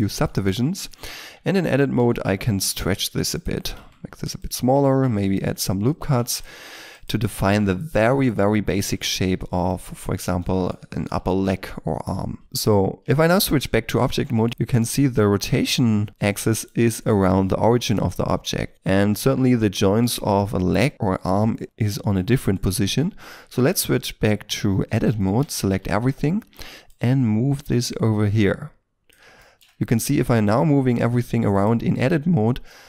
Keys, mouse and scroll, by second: 0.0 middle click, 1.1 Tab, 1.9 s, 2.2 x, 2.6 y, 3.7 s, 5.0 ctrl+r, 6.2 ctrl+r, 6.3 ctrl+click, 7.4 s, 8.1 alt+right click, 8.7 alt+shift+right click, 9.0 shift+s, 10.0-10.4 scroll down 1, 10.4 middle click, 11.2 KP_3, 12.4 shift+middle click, 13.1 shift+middle click, 13.6-14.2 shift+scroll up 1, 14.2 r, 14.5 right click, 15.7 r, 18.1-20.5 scroll down 1, 21.6 scroll up 1, 21.8-22.3 scroll down 1, 22.3 shift+middle click, 23.3 Tab, 25.3 a, 25.7 a, 29.4 shift+middle click, 30.0 g, 31.5 right click, 32.3 g.